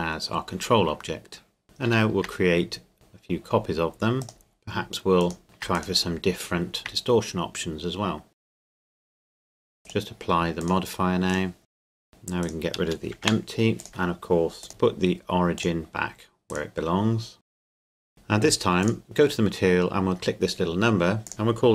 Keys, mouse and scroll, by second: 1.6 middle click, 1.8 shift+d, 4.2 click, 5.4 shift+d, 5.7 click, 6.8 shift+d, 8.3 click, 8.5 g, 8.6 click, 8.8 scroll down 1, 8.9 g, 9.0 click, 9.1 middle click, 9.7 click, 11.3 right click, 11.7 click, 11.8 right click, 11.9 click, 12.4 right click, 13.2 Delete, 13.8 click, 16.5 right click, 17.4 click, 17.5 right click, 17.6 middle click, 17.7 click, 17.9 right click, 17.9 click, 18.1 shift+middle click, 18.8 click, 21.3 click.